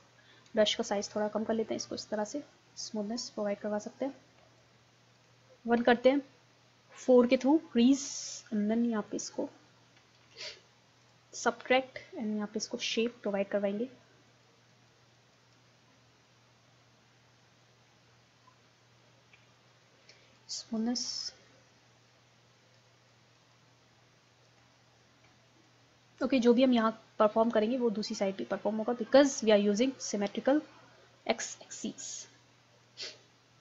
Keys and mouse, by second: 5.8 KP_1, 7.3 4, 9.1-10.4 drag, 10.4 ctrl+z, 11.3-12.9 middle drag, 13.3-17.9 middle drag, 18.1 middle click, 20.4-22.0 middle drag, 22.0-24.8 drag, 24.8-26.5 middle drag, 26.5-28.3 drag, 28.3 middle click, 31.1 click.